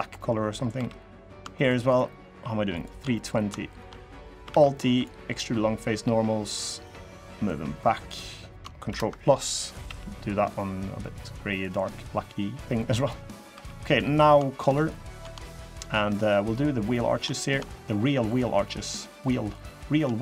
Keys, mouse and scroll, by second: 0.2 scroll up 3, 0.5 3, 1.0 click, 1.4 shift+click, 1.6 shift+click, 2.5 click, 2.9 middle click, 3.4 shift+click, 4.2 alt+e, 7.2 click, 8.6 ctrl+KP_Add, 9.6 g, 12.0-12.5 scroll down 1, 12.5 middle click, 12.8-13.3 scroll up 3, 13.3 3, 13.5 middle click, 13.9 click, 14.3 shift+click, 14.5 shift+click, 14.8 shift+click, 15.2 shift+middle click, 15.9 shift+click, 16.2 shift+click, 16.6 shift+click, 16.8 shift+click, 17.1 middle click, 17.4 shift+scroll up 1, 17.5 shift+middle click, 18.0 shift+click, 18.3 shift+click, 18.6 shift+click, 18.9 shift+click, 19.2 shift+click, 19.8 shift+middle click.